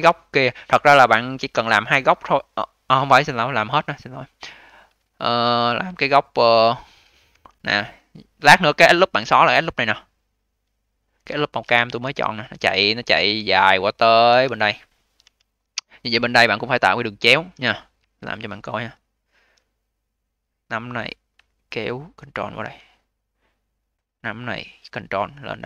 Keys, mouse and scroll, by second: 0.2-3.2 scroll up 1, 5.4-6.5 scroll down 4, 6.5-7.2 scroll down 1, 7.2 2, 7.8-9.6 scroll up 6, 9.6 click, 9.8 click, 10.4-11.2 scroll down 3, 11.2-11.9 alt+middle drag, 11.9 d, 12.2-12.7 scroll down 2, 12.7-13.4 alt+drag, 13.4-13.7 scroll down 1, 13.7-15.1 alt+drag, 15.1 d, 15.3-16.5 scroll up 13, 16.5-17.9 alt+drag, 17.9 1, 18.9 click, 19.7 click, 23.0 click, 23.8 click.